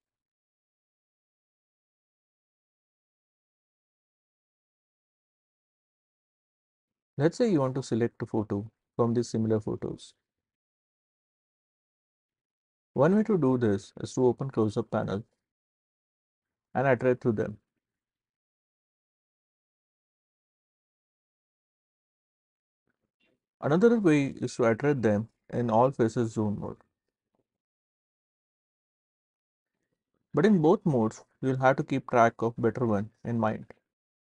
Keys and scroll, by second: 18.1 s, 19.1 s, 20.1 s, 28.0 w, 29.0 w, 30.0 s.